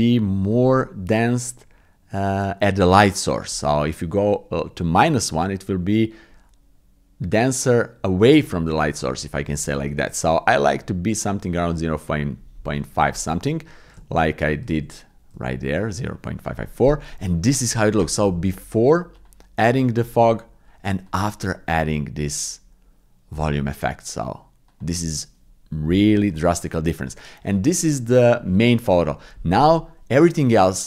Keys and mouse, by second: 3.7-12.7 drag, 13.2 ctrl+z, 14.1 ctrl+z, 14.8 ctrl+z, 15.5 ctrl+z, 19.1 click, 21.1 click, 24.7 click, 26.3 click, 28.2 click.